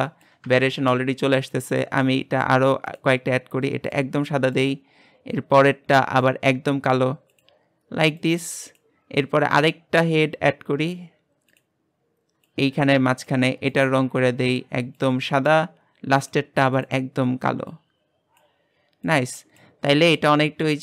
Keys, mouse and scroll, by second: 1.5-3.6 drag, 6.4-8.3 drag, 11.6-15.0 drag, 16.3 click, 17.1 click, 20.3-20.8 middle drag.